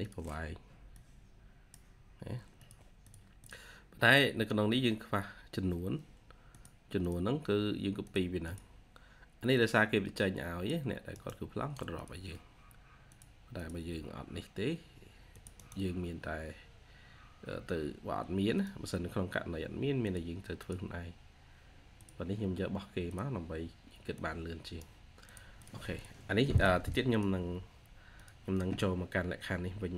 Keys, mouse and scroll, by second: 2.9 double click, 8.3 double click, 11.0 right click, 12.0 typing, 13.5 double click, 14.2-14.6 scroll up 1, 15.4 right click, 20.7 typing, 23.1 typing, 25.5 double click.